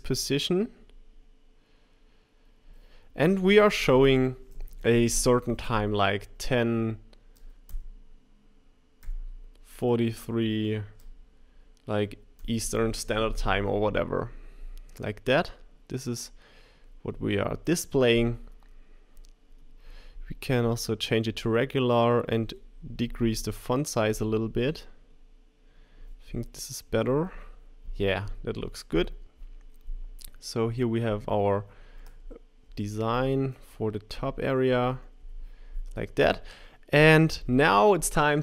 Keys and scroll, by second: 9.0 4, 10.3 3, 26.9 Right, 32.6 Up, 33.1 Up, 34.1 Up, 34.6 shift+Up, 35.2 Down.